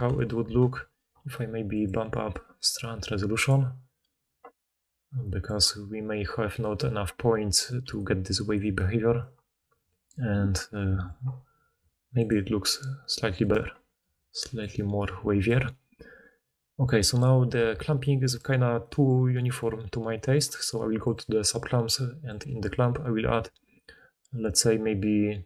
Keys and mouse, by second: 0.0 a, 0.5 alt+a, 1.8-3.2 middle drag, 3.2-12.3 drag, 7.7-8.7 d, 8.7-12.3 middle drag, 8.7-12.3 right drag, 9.1 d, 10.6 d, 14.0 d, 14.6 d, 14.7 d, 15.5 d, 17.7 alt+a, 21.1-24.4 drag.